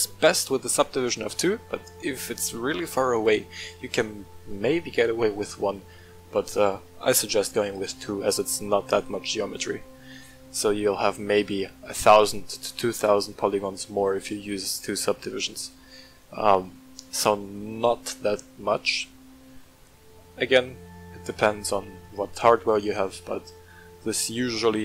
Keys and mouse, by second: 1.0 click, 3.1 click, 5.1-6.4 middle drag, 7.7 click, 17.1-19.6 middle drag, 24.4-24.8 middle drag.